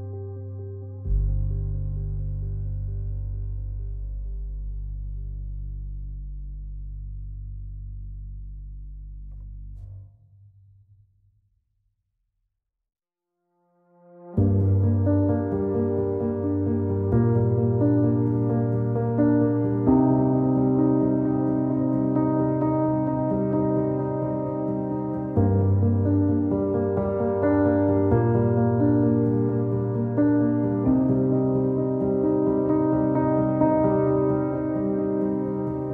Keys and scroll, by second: 11.0 typing, 26.4 q, 27.5-28.2 typing, 34.5 alt+x.